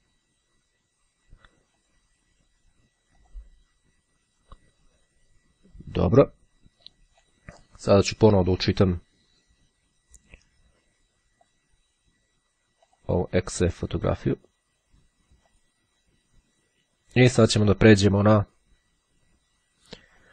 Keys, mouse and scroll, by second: 1.4-2.5 drag, 3.2 click, 7.1 click, 9.0 click, 11.5 click, 13.0 click, 15.5 click, 20.1 click.